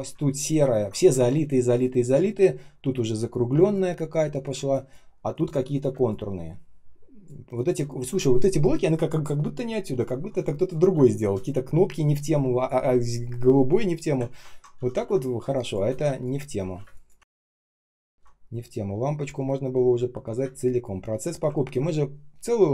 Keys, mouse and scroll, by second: 1.0 space, 1.5 space, 1.5 space, 3.5 space, 4.0 space, 4.0 space, 10.5 shift+click, 10.8 space, 12.7 Delete, 14.1-14.7 ctrl+scroll down 1, 14.7 ctrl+я, 15.3 space, 16.0 space, 16.7 space, 17.2 ctrl+scroll up 1, 17.8 ctrl+scroll down 1, 20.3 space, 20.8 space, 21.5 ctrl+scroll up 1.